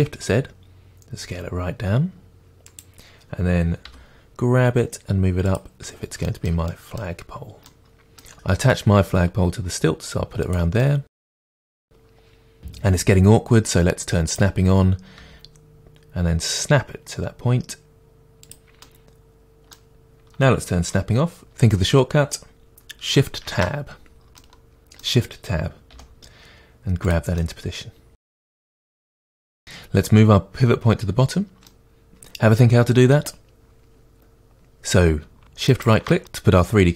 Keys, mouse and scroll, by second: 2.8 click, 3.8 g, 5.5 click, 5.8-6.2 scroll down 2, 6.2-11.4 shift+middle drag, 7.2-7.6 scroll up 2, 9.2 g, 11.4 drag, 11.6-14.0 middle drag, 14.2 click, 15.2 g, 18.5 click, 18.8-23.4 middle drag, 23.4 shift+Tab, 24.4 middle click, 25.9 g, 27.0-29.1 middle drag, 27.1 click, 29.1 g, 29.6-31.6 drag, 31.6-32.0 middle drag, 35.7-36.9 middle drag, 35.7 shift+right click.